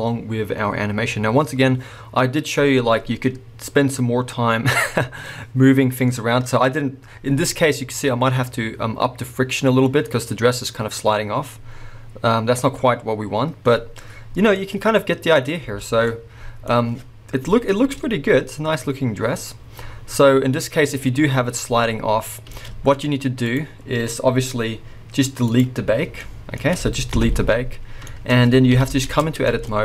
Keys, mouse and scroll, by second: 15.8 space, 17.8 space, 22.7 space, 23.4 click, 25.5 click, 26.2-27.3 middle drag, 27.3 shift+Left, 28.0-28.7 shift+middle drag, 28.7 KP_1, 29.1 Tab, 29.5 shift+middle click, 29.7 scroll up 2.